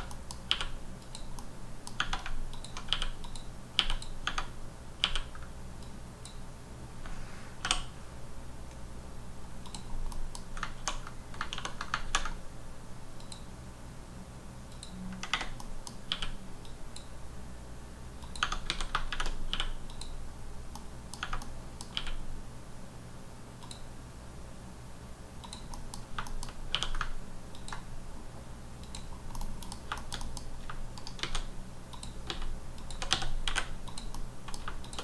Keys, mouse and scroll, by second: 0.1 middle click, 1.0 click, 1.3 middle click, 2.2 alt+scroll up 1, 2.5 click, 3.2 click, 3.9 click, 4.6-5.0 scroll up 3, 5.8 click, 8.9-9.6 scroll up 4, 9.6 click, 9.9 scroll down 3, 10.0 scroll, 10.1 middle click, 10.3 scroll down 1, 10.4 scroll up 2, 10.8 ctrl+1, 11.5 ctrl+2, 13.2 click, 14.7 click, 15.6 middle click, 16.6 click, 18.2 click, 18.6 a, 19.9 click, 20.3-20.7 scroll down 1, 20.7 middle click, 21.4 middle click, 21.9 q, 23.6 click, 25.4 click, 25.7 middle click, 25.9-26.7 scroll up 4, 26.3 shift+middle click, 27.5 ctrl+click, 29.1 scroll down 3, 29.3 middle click, 29.6 KP_1, 29.9 middle click, 30.2 double middle click, 30.4 scroll up 2, 31.0 shift+right click, 31.2 shift+a, 31.9 click, 32.2 s, 32.7 click, 32.9 s, 33.1 x, 33.4 y, 33.8 click, 34.1 middle click, 34.5 scroll down 2, 34.8 shift+click.